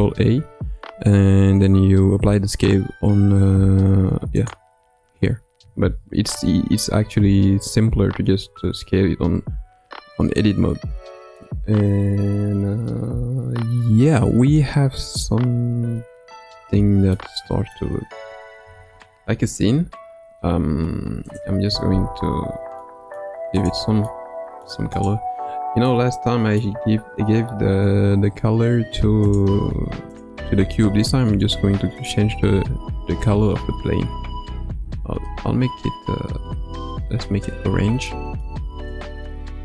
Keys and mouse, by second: 5.9 ctrl+z, 6.9 ctrl+z, 7.3 Tab, 9.4 Tab, 17.1-17.8 middle drag, 18.6 g, 21.6 Tab, 22.2 Tab, 22.8 middle click, 24.0-24.7 middle drag, 25.8-26.6 middle drag, 29.3 click, 30.5-32.1 drag, 38.0-38.5 middle drag, 38.9 click.